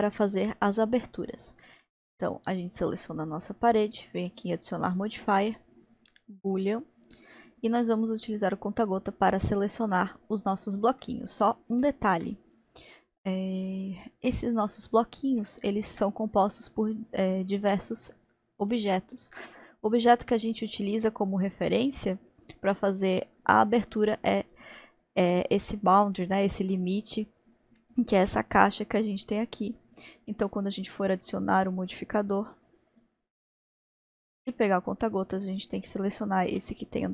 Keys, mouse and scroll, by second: 2.7 click, 5.0-8.2 drag, 11.0-14.2 middle drag, 14.2 click, 14.8 scroll up 1, 15.5-16.7 shift+middle drag, 16.7-17.4 scroll up 2, 20.0 scroll up 1, 20.2-24.2 middle drag, 24.4 click, 32.2-33.1 drag, 34.2 click.